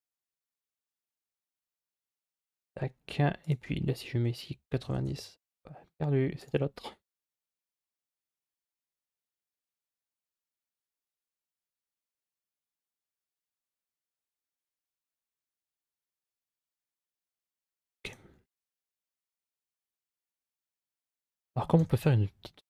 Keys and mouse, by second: 3.2-7.6 drag, 8.2 click, 9.0-10.4 drag, 12.0-17.6 middle drag, 17.9 Tab, 19.4 middle click, 20.8 right click, 21.6 3, 21.8 right click.